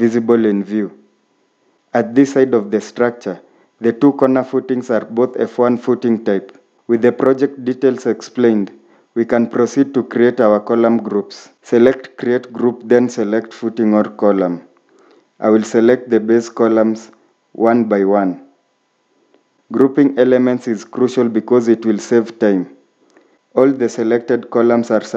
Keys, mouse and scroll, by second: 0.9-2.1 scroll down 1, 8.8 scroll up 1, 10.5 middle click.